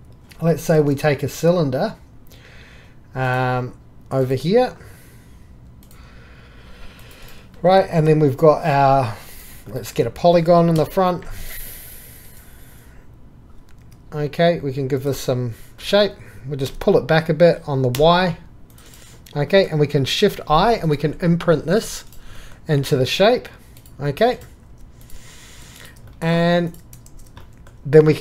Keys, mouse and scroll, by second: 3.7 click, 4.3-5.8 drag, 9.4 click, 12.2 KP_1, 15.5 shift+click, 16.7 g, 20.9 click, 21.7-22.1 drag, 22.1 drag, 22.8 4, 24.4 click, 24.7 3, 27.1 shift+x, 27.7-28.2 drag.